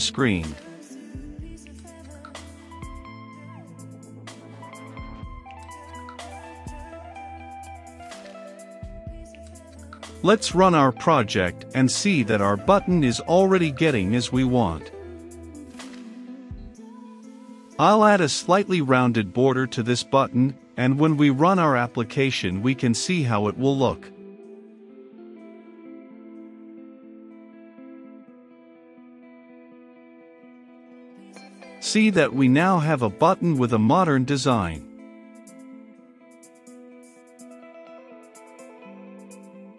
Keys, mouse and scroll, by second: 18.5 Return, 18.6-19.0 typing, 19.3 Return, 19.6 ctrl+space, 19.8 Return, 20.9-39.7 drag.